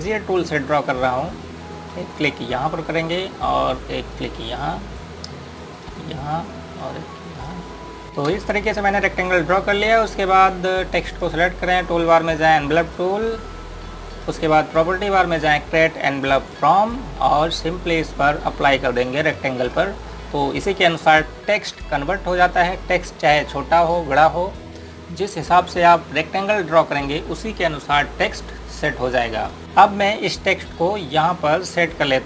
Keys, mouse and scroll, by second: 9.1 space, 9.5 scroll down 1, 10.5-11.9 scroll up 1, 11.9 click, 29.6 typing, 30.2 click.